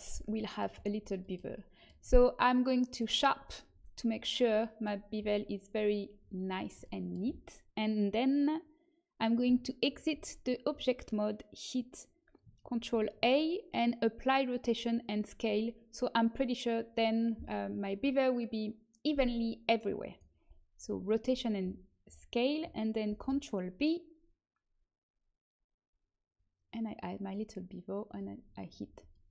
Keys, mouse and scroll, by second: 2.8-4.0 drag, 4.1 click, 9.4 Tab, 12.7 ctrl+a, 20.1 click, 20.7 middle click, 21.1 Tab, 23.0 ctrl+b, 28.0-29.3 drag, 29.0-29.3 middle drag.